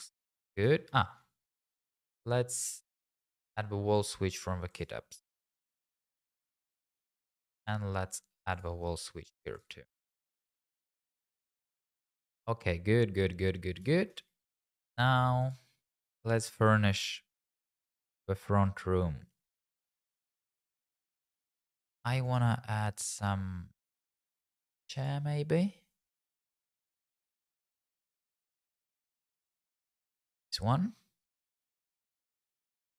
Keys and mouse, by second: 0.2 middle click, 1.2 click, 2.2 middle click, 2.9 click, 3.9 click, 5.3 click, 7.6 click, 8.5 click, 9.6 click, 10.0 middle click, 12.1 middle click, 15.0 middle click, 15.4 click, 19.5 shift+middle click, 19.9 middle click, 22.4 click, 25.0 click, 29.9 click, 31.4 r, 31.5 z, 32.3 click.